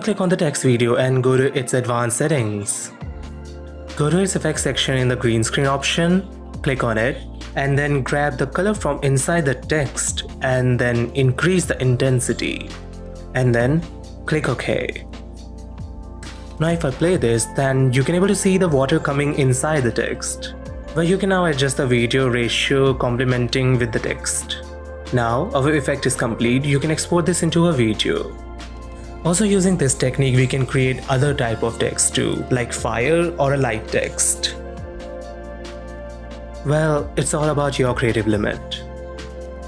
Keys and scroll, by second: 16.1 space, 22.6 space, 25.2 space.